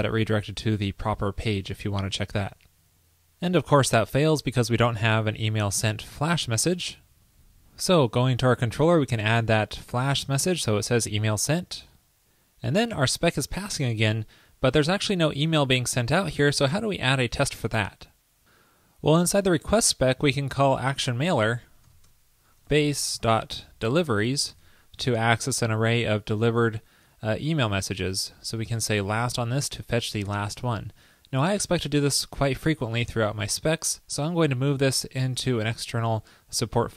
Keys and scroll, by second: 1.8 super+s, 9.2 super+v, 11.2 super+s, 32.5 shift+super+Left.